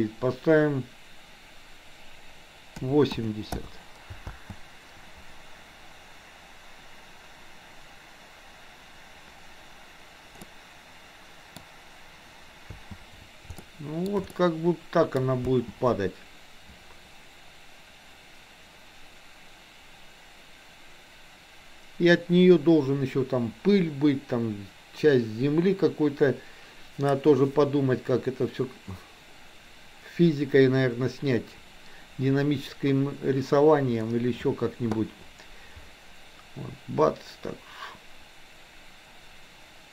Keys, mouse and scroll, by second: 4.3 space, 10.4-11.6 middle drag, 12.7 space, 13.7-14.1 shift+middle drag, 14.3 middle click.